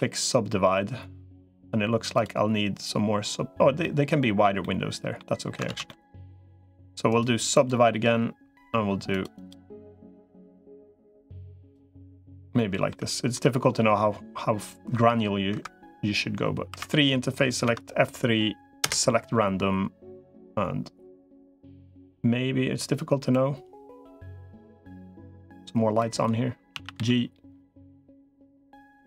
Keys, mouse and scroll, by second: 0.3-1.5 middle drag, 3.6 middle click, 4.4 middle click, 5.6 ctrl+z, 5.7 middle click, 6.4 middle click, 7.0 right click, 9.2 click, 11.4 click, 12.3 middle click, 13.1 middle click, 14.8 F3, 16.6 3, 17.4 F3, 23.2-26.0 drag, 26.6 a, 26.8 g.